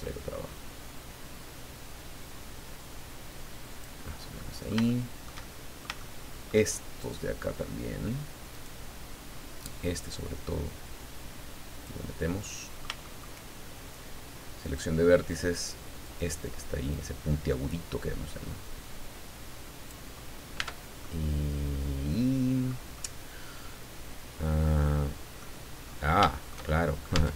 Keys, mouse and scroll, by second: 1.7 scroll down 1, 2.2-2.5 scroll up 1, 4.4-6.6 middle drag, 8.5 right click, 9.6-12.0 drag, 12.4 middle click, 12.8 shift+click, 14.6 click, 16.0 middle click, 16.9-18.4 drag, 18.4-19.2 scroll up 2, 20.1 scroll down 2, 20.6 Tab, 21.0-22.9 middle drag, 22.9-25.6 middle drag, 25.8 scroll up 2, 26.3 shift+middle click, 26.4 shift+scroll up 2, 26.6 shift+middle click, 27.1 shift+Tab.